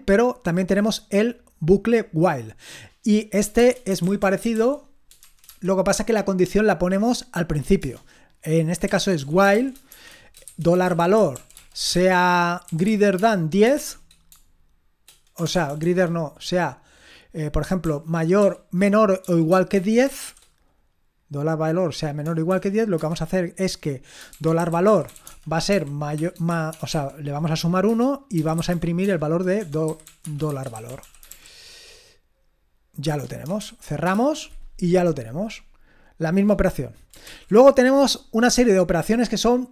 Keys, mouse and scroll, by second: 3.6-5.4 typing, 7.8 Return, 8.6-14.2 typing, 15.4-15.9 typing, 18.2-20.2 typing, 22.9 Return, 24.1-31.8 typing, 27.8 Return, 33.1 Return, 33.6-34.0 typing, 37.3 ctrl+l, 39.2-39.7 scroll down 1.